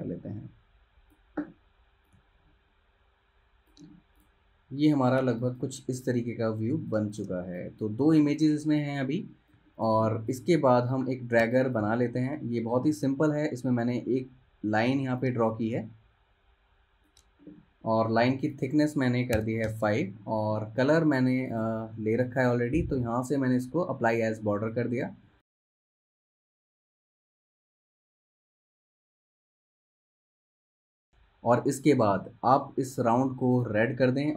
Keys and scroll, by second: 5.3 space, 7.4-8.1 typing, 9.3 space, 11.5 space, 19.5 5, 19.8 Return, 20.7 v, 25.1 z, 25.8 v, 31.1 super+z.